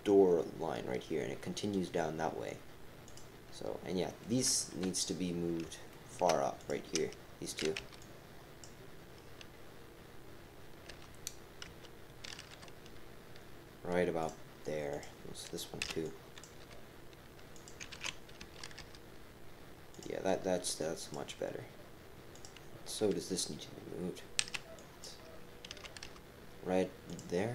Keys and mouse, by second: 3.0 click, 4.1 click, 4.7 KP_3, 5.9 shift+click, 10.9 g, 14.9 click, 15.8 b, 16.6 g, 17.9 ctrl+z, 18.4 g, 21.0 click, 22.3 click, 24.4 b, 25.7 g.